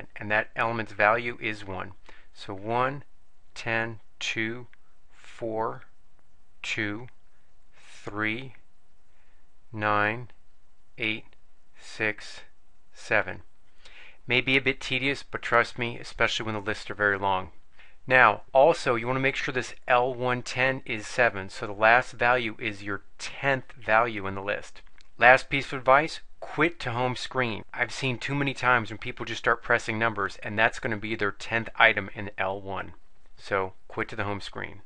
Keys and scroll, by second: 3.1 Down, 3.9 Down, 5.1 Down, 6.1 Down, 7.5 Down, 10.5 Down, 11.5 Down, 12.9 Down.